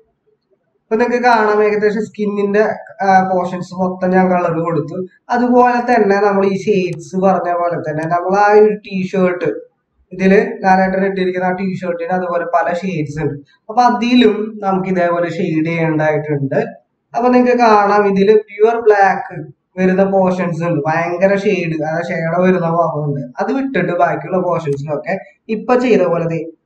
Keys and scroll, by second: 5.0 ctrl+=.